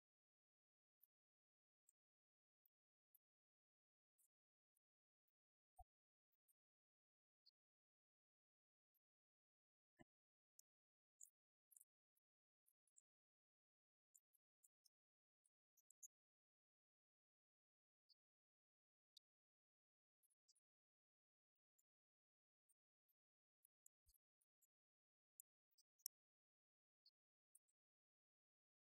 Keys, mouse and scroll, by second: 2.1 click, 11.4 click, 12.9 KP_0, 16.5-16.9 middle drag, 18.4 right click, 22.1 KP_0, 23.7 KP_0, 25.6 right click, 27.1-28.1 drag, 28.1 KP_0.